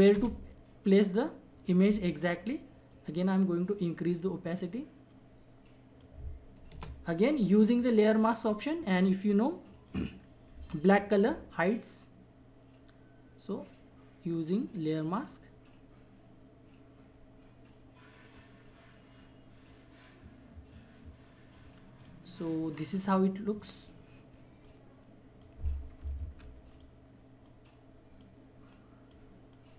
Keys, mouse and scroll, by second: 0.1 Return, 2.9-6.7 drag, 6.7 Return, 8.4-21.7 drag, 21.9-26.2 drag, 26.2 ctrl+z, 26.7 click, 27.5 click, 28.9-29.7 drag.